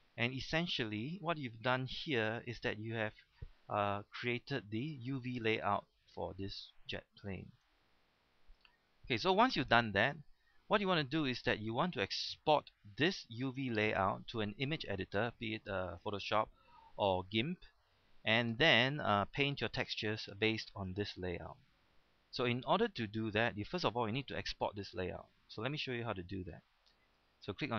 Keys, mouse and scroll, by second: 0.4 shift+middle click, 0.8 scroll up 1, 1.1 shift+middle click, 2.2 a, 3.9-5.5 middle drag, 7.1 shift+middle click, 8.0 scroll up 1, 8.3 shift+middle click, 23.8-24.3 scroll up 1, 24.3 scroll down 1, 26.5-27.7 drag.